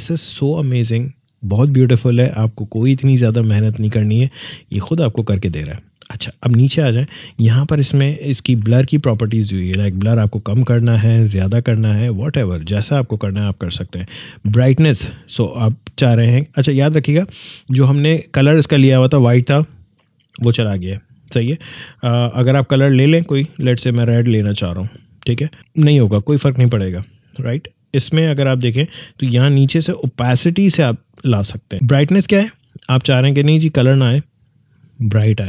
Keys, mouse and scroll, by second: 4.7 click, 6.4-8.6 scroll down 1, 9.2-14.6 drag, 22.8 click, 28.2-30.0 scroll down 1, 30.0-32.1 drag, 34.7-35.4 drag.